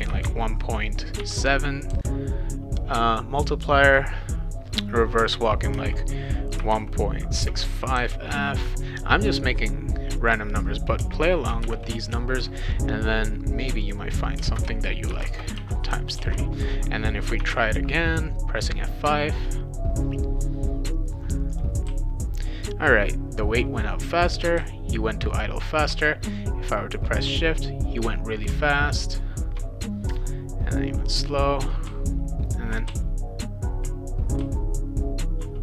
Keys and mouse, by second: 0.0-1.9 typing, 3.8 click, 5.7-8.5 typing, 10.1 click, 11.0 space, 11.6 shift+8, 13.8 click, 14.4 space, 15.1 shift+8, 15.2 space, 15.6 3, 16.1 ctrl+s, 21.5 click, 21.8 w, 24.6 w, 25.9 shift+w, 31.9 s, 32.9 w, 34.4 s.